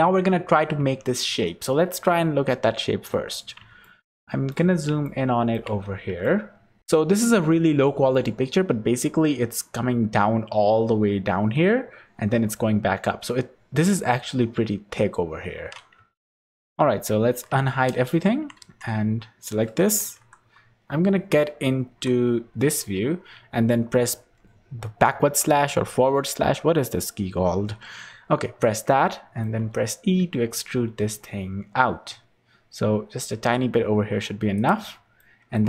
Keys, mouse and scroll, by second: 0.7 Tab, 2.3 h, 3.0 scroll up 4, 3.8 shift+middle click, 5.7-6.0 scroll up 8, 6.8 shift+middle click, 6.8 scroll up 1, 15.9 Tab, 16.2 scroll down 2, 16.5 Tab, 17.3 alt+h, 18.2 Tab, 18.5 3, 20.1 KP_3, 20.9 scroll down 5, 21.8 KP_1, 23.1 scroll up 2, 24.1-24.8 scroll up 1, 25.2 /, 28.9 shift+middle click, 29.6-30.5 scroll up 3, 30.1 e, 35.1 shift+middle click.